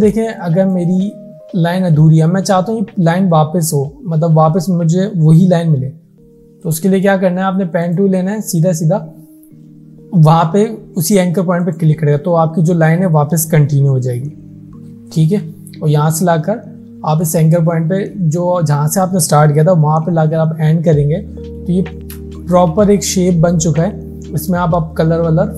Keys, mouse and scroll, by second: 0.3 space, 0.5 click, 0.8-1.1 space, 6.6 click, 11.7 click, 12.6 alt+scroll down 1, 15.2 click, 18.3 alt+scroll up 1, 21.7 alt+Num_Lock, 21.7 alt+scroll up 1, 21.9 alt+scroll down 1, 22.2 space, 22.4 click, 22.9 alt+scroll up 1.